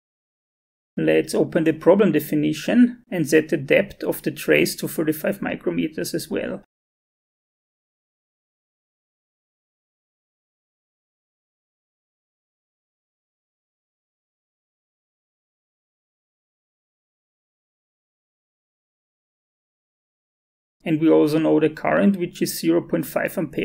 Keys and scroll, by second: 11.6-12.4 typing, 16.0 5, 21.9-23.1 typing.